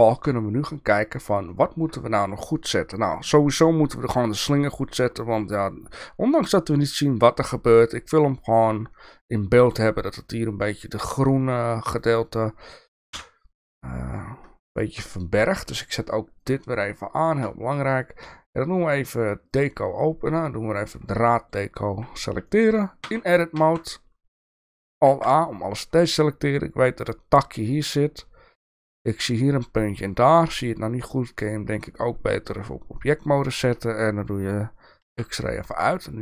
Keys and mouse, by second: 1.5 shift+middle click, 11.8 click, 13.1 KP_3, 14.7 shift+middle drag, 16.4 click, 17.1-17.5 shift+middle drag, 20.7 click, 21.2 shift+middle click, 22.5 shift+middle click, 23.5 Tab, 25.1 alt+a, 29.0 click, 32.5 click, 35.0 alt+z.